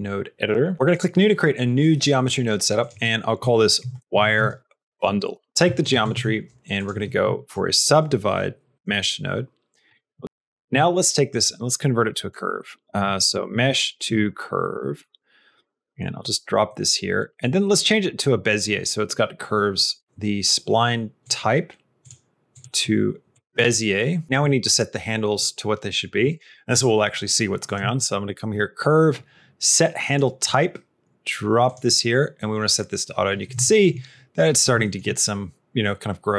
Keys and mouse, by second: 0.8 click, 2.7-5.5 drag, 5.6 middle click, 6.0 shift+a, 10.6 shift+a, 13.1 BackSpace, 16.6 middle click, 19.8 click, 22.5 click, 27.5 click, 27.8 shift+a, 33.5 shift+middle click, 34.7 shift+middle click.